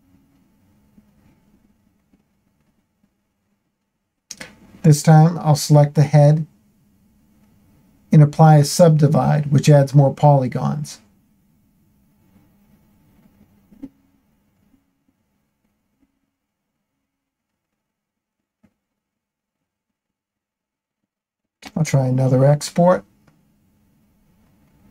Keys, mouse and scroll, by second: 1.1 Tab, 2.8 click, 4.4 ctrl+l, 5.2 space, 11.7 space, 14.8 Tab, 18.6-20.8 drag.